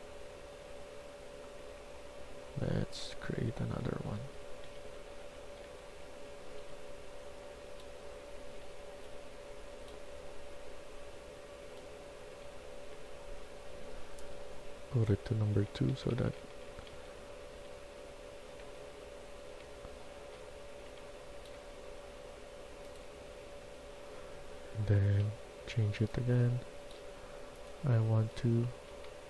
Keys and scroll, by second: 3.8-6.5 typing, 8.5 e, 11.1 e, 12.2-15.4 typing, 16.6-19.7 typing, 20.7-21.3 typing, 23.1-25.7 typing, 28.1-29.2 typing.